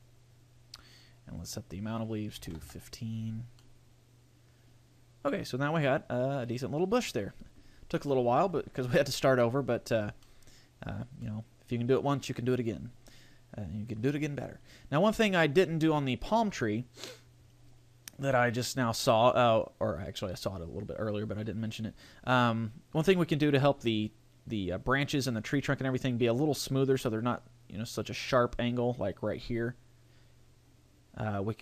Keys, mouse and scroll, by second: 1.3 click, 3.6 middle click, 8.1 middle click, 9.1 middle click, 10.2 middle click, 11.3 middle click, 15.1-16.6 scroll up 1, 19.7-21.4 scroll up 1, 21.4 scroll up 1, 28.4 scroll up 4, 30.9-31.6 scroll down 1.